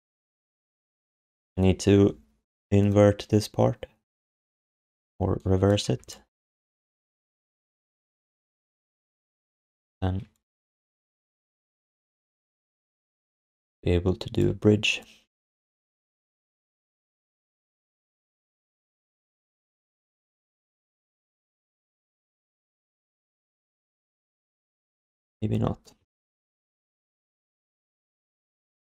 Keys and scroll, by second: 6.0 alt+d, 24.8 alt+shift+d, 27.9 g.